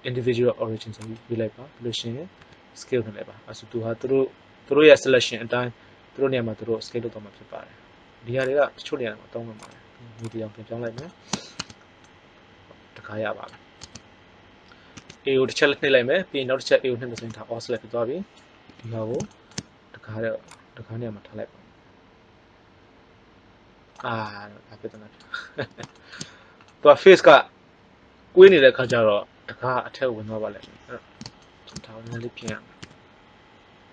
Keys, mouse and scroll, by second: 2.3 s, 8.5 click, 11.5 Tab, 13.7 Tab, 14.9 a, 17.1 a, 18.6 KP_3, 20.4-21.6 drag, 24.1-26.3 middle drag, 30.5 KP_3, 32.7 z, 33.8-33.9 drag.